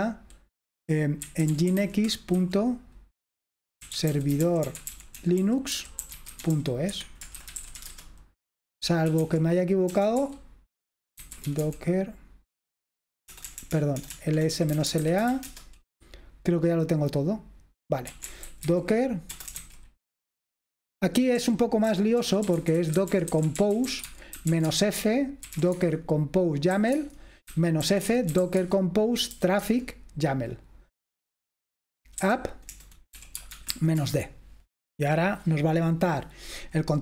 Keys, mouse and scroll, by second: 1.0-2.4 typing, 3.6-15.8 typing, 17.9-20.0 typing, 21.4-29.4 typing, 32.0-37.0 typing.